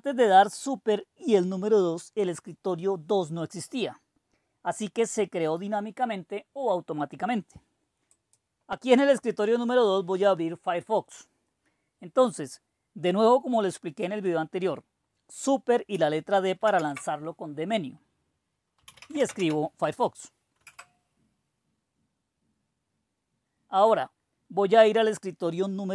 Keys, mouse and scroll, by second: 8.1 click, 16.6 super+d, 18.6-19.8 typing, 20.6 Return.